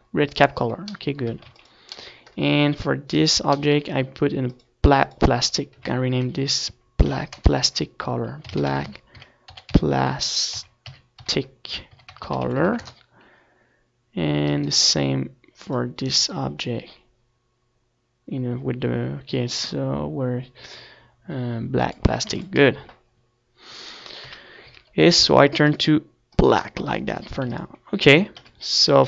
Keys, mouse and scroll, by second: 4.4-17.1 middle drag, 6.5 a, 6.7 ctrl+s, 8.6-17.1 right drag, 10.0-17.1 drag, 20.0-27.2 right drag, 27.6 ctrl+s, 27.9-29.0 middle drag, 27.9 z.